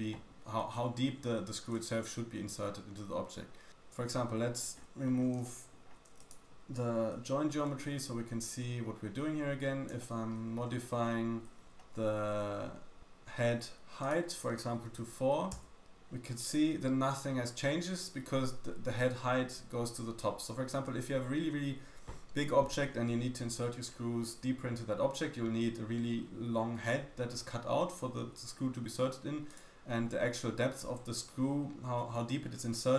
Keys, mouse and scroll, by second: 4.5-5.4 scroll down 5, 5.4 shift+middle click, 6.2 click, 8.6 m, 9.9 shift+middle click, 10.4-10.9 scroll up 5, 10.9-11.4 shift+middle drag, 11.4-12.5 shift+scroll up 4, 14.0 click, 14.0 middle click, 14.0 right click, 29.5 click.